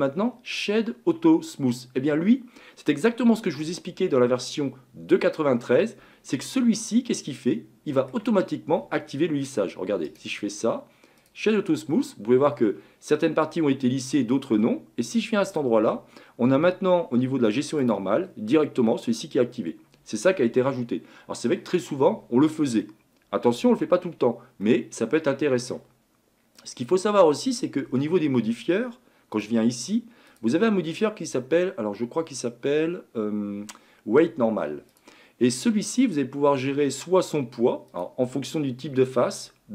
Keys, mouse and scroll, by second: 7.6-15.5 middle drag, 15.5 click, 18.0 drag, 18.2 scroll down 2, 20.6-26.7 middle drag, 26.7-27.9 drag, 27.9-28.5 scroll down 1, 28.6 scroll down 9, 29.3 click, 30.3-33.4 drag, 37.9-39.7 drag.